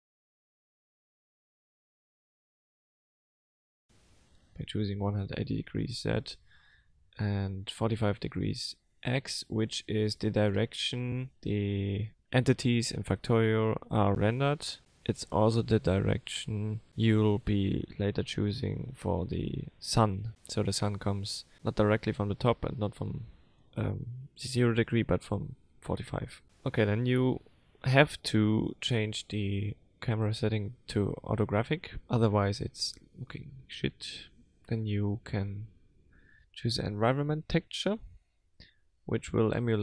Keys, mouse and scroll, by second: 0.2 middle click, 0.7 click, 1.1 click, 1.5 click, 2.1 middle click, 3.2 click, 5.9 click, 9.1 click, 11.2 KP_0, 12.1-13.5 scroll down 2, 13.5 click, 27.0 click, 31.4 l, 32.2 middle click, 32.7-33.4 scroll down 3, 33.4 middle click, 36.2 click, 37.8 click.